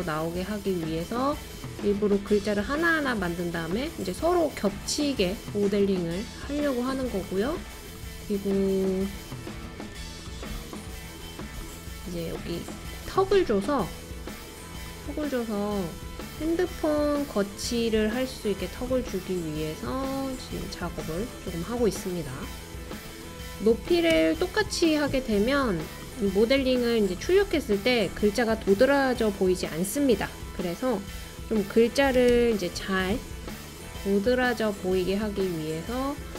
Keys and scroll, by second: 23.6-23.9 typing, 24.1 Return, 31.9-32.8 typing, 33.9-34.7 typing.